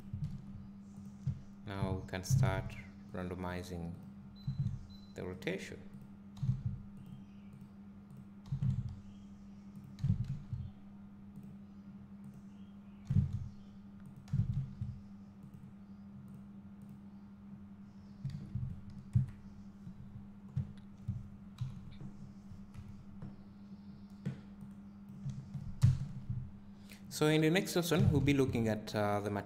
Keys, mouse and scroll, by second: 3.6 click, 4.4 r, 5.4 click, 6.4 r, 8.2 click, 8.5 r, 9.8 click, 10.0 g, 12.3 click, 13.1 r, 14.1 click, 14.3 g, 16.4 click, 18.3 alt+a, 19.1 KP_0, 20.3 scroll down 1, 20.5 `, 21.6 KP_5, 22.1-22.7 scroll down 1, 22.7 KP_1, 24.6-27.2 drag, 25.8 ctrl+alt+KP_0, 27.9 g.